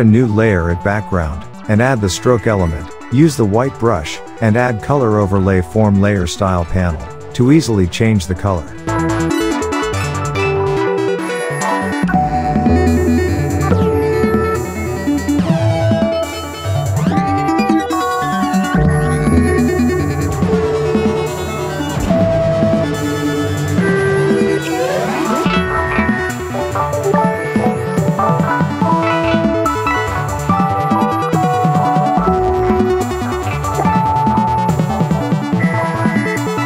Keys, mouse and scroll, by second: 1.4 alt+scroll down 2, 1.7 space, 1.8-2.3 click, 2.1 space, 2.6-4.7 drag, 5.5-5.9 alt+right click, 6.0 space, 6.1-6.8 click, 6.4 space, 7.4 click, 8.8 space, 8.8 click, 9.7 alt+right click, 10.0 ctrl+z, 10.1-11.3 drag, 13.4 click, 16.4 click, 18.8 click, 21.4 click, 24.5-25.0 drag, 28.1 click, 30.6 Tab, 35.1 click.